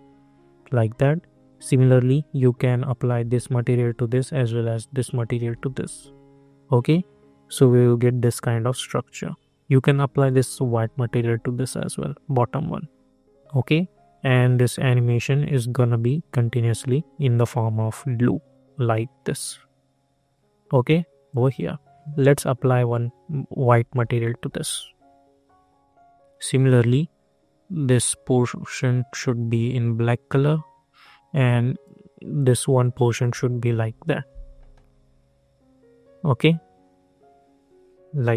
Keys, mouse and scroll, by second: 2.0-5.4 drag, 5.4 ctrl+r, 9.8 click, 10.8 ctrl+r, 15.5 -, 15.5 click, 21.2-23.9 drag, 23.9 ctrl+r, 26.8-33.6 drag, 33.6 ctrl+r.